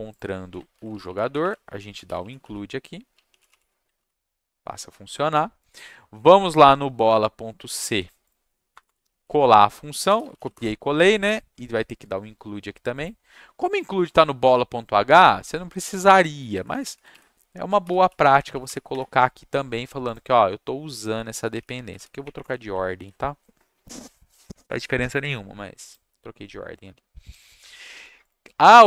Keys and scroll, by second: 0.7 ctrl+shift+Down, 0.9 Left, 1.0 Left, 1.1 Left, 2.0-4.2 typing, 8.7 Return, 8.8 Return, 9.1 ctrl+v, 10.0 BackSpace, 10.3 space, 10.3 shift+], 10.5 Return, 16.4 ctrl+shift+Down, 16.5 Left, 16.6 Left, 16.8 Left, 17.5-19.1 typing, 21.8 ctrl+shift+x, 21.9 shift+BackSpace, 22.2 Up, 22.4 Return, 23.0 ctrl+v.